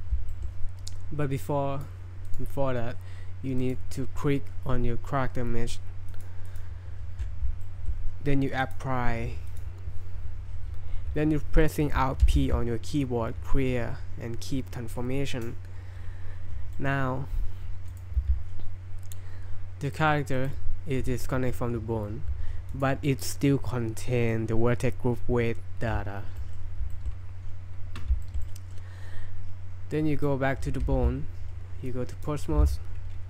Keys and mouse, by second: 0.3 shift+middle drag, 1.6 click, 2.3-3.0 drag, 3.6 click, 6.1 click, 6.4 click, 7.6 shift+middle drag, 8.8-9.6 drag, 12.2 alt+p, 16.7 click, 16.8 middle click, 17.9 click, 18.2 g, 19.9 drag, 20.4 click, 24.4 click, 26.4 drag, 26.9 shift+drag, 28.2 shift+click, 28.4-28.8 drag, 28.8 middle click, 30.2 right click, 31.0 ctrl+z, 31.9-32.3 drag.